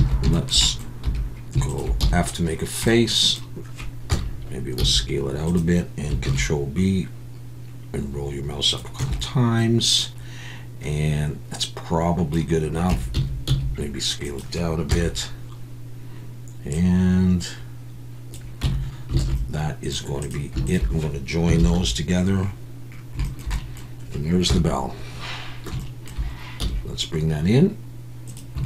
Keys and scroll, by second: 0.1 alt+a, 1.0 2, 2.0 f, 4.1 KP_1, 4.8 s, 6.2 ctrl+b, 9.0 Tab, 12.9 Tab, 13.1 a, 13.4 s, 14.9 KP_1, 18.6 Tab, 19.2 alt+a, 21.6 ctrl+j, 24.5 KP_1, 26.6 g.